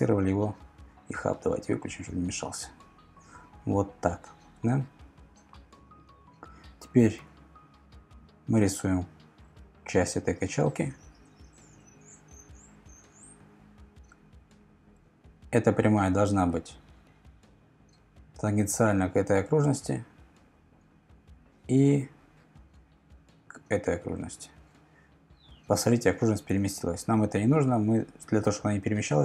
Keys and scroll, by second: 7.2 l, 14.9 Escape, 29.0 super+z.